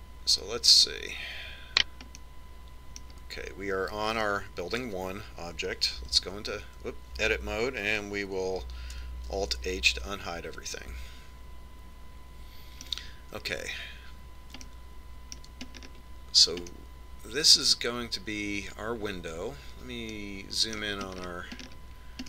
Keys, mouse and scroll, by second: 1.7 right click, 3.3-5.1 middle drag, 7.2 Tab, 10.5 alt+h, 11.8-13.5 middle drag, 15.7-17.4 middle drag, 17.8-19.5 middle drag, 21.3-22.2 middle drag.